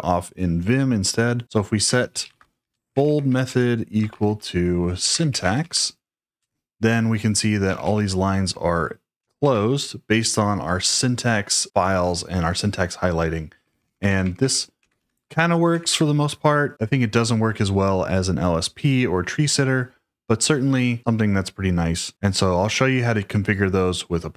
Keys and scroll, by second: 1.6-6.1 typing, 6.3 Return, 7.4-9.6 typing, 13.5-15.8 typing.